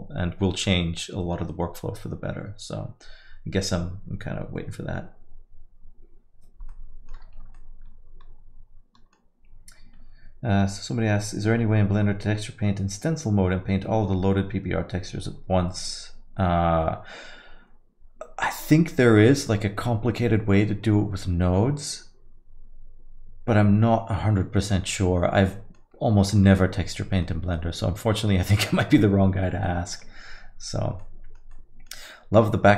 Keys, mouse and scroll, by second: 6.7 middle click, 7.6 alt+middle click, 19.8 alt+middle click, 20.6 middle click, 24.9 alt+middle click, 26.3 alt+middle click, 28.2 alt+middle click, 29.7 alt+middle click, 31.0 alt+middle click, 31.5 alt+middle click, 32.1 alt+middle click.